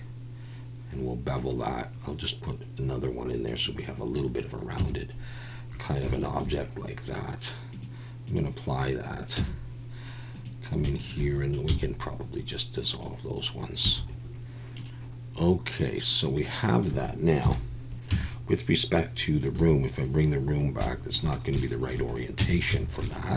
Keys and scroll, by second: 4.8 Tab, 9.4 Tab, 11.7 x, 13.8 a, 17.4 KP_1, 18.1 Tab, 19.6 /, 22.4 Tab, 22.7 a.